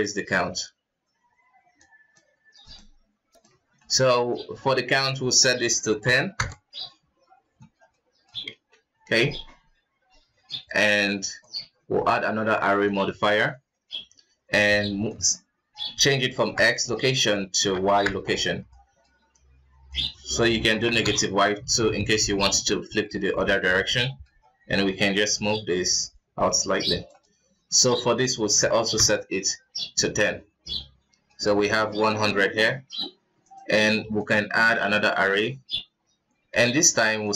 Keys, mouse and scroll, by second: 1.5-2.5 drag, 3.8-4.9 middle drag, 4.9-7.6 drag, 7.6-7.9 scroll down 5, 7.9-8.5 middle drag, 8.5 ctrl+s, 10.5 click, 11.4-13.3 drag, 13.3 middle drag, 13.5 scroll up 1, 15.1-18.7 drag, 18.7-19.9 middle drag, 19.9-22.1 drag, 22.1 middle click, 22.8-23.3 scroll up 3, 23.3 ctrl+s, 23.9-25.3 middle drag, 25.3-29.5 shift+drag, 29.5-30.0 scroll down 2, 30.0 middle drag, 30.2-30.8 scroll up 3, 30.8-33.4 middle drag, 33.4 click, 34.2-35.5 drag, 35.5-36.5 scroll down 7, 36.5 ctrl+s, 37.2-37.3 drag.